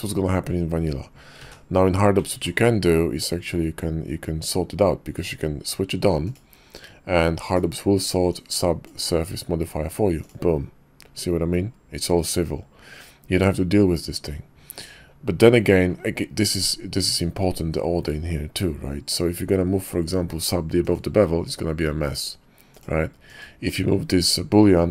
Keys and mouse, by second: 1.5 ctrl+z, 2.3 ctrl+`, 8.3-10.3 drag, 22.7 click, 23.3 click, 24.1 click.